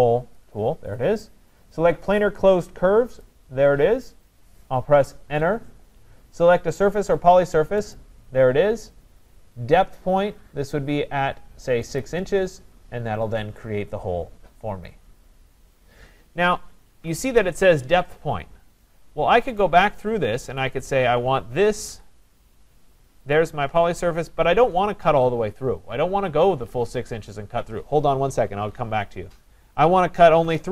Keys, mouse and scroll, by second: 0.4 click, 3.2 click, 5.3 Return, 8.0 click, 12.0 click, 16.9 ctrl+z, 19.6 right click, 20.7 click, 21.9 Return, 23.3 click, 27.0-28.5 drag, 30.5 3.